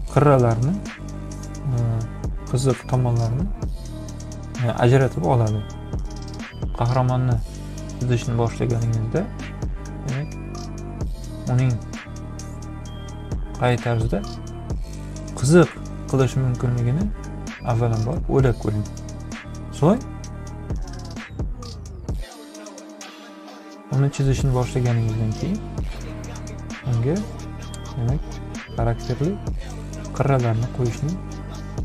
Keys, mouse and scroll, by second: 0.3-1.4 drag, 7.1-10.7 drag, 11.6-13.3 drag, 14.7-16.8 drag, 19.5-20.9 drag, 21.4-23.6 drag, 27.3 click, 28.5 click, 29.4-30.9 drag.